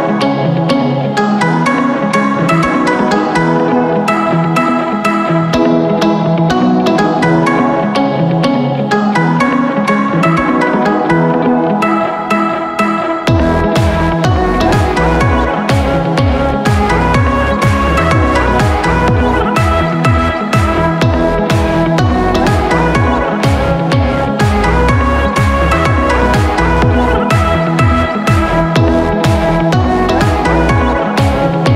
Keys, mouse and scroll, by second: 0.5 click, 0.8-1.6 shift+middle drag, 1.6 click, 2.2-3.8 drag, 3.8 scroll down 1, 4.0-4.4 scroll up 2, 4.4-6.1 shift+middle drag, 6.1-7.5 drag, 7.5-8.3 middle drag, 8.3 click, 8.8-10.5 middle drag, 10.5 scroll down 1, 11.6 middle click, 12.0 Tab, 12.5 shift+middle click, 12.9 scroll down 1, 13.8 click, 15.4 scroll up 1, 15.6 middle click, 16.3 scroll up 1, 16.6 shift+middle click, 17.0-17.6 scroll up 4, 17.6-18.3 scroll down 10, 18.3 alt+z, 18.9 click, 19.5-19.8 scroll up 9, 19.8 middle click, 20.3 alt+z, 20.5-21.0 scroll up 4, 21.0-22.5 shift+middle drag, 22.5 ctrl+b.